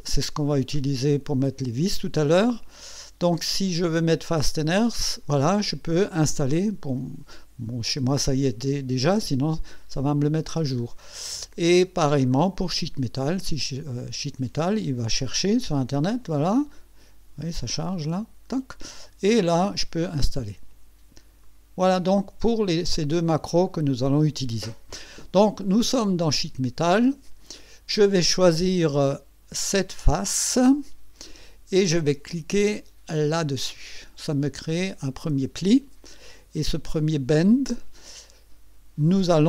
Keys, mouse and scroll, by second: 10.7-12.4 scroll down 8, 13.3 click, 21.4 click, 23.6 click, 30.0 click, 33.3 click, 35.3 click, 36.8 click, 37.4 click.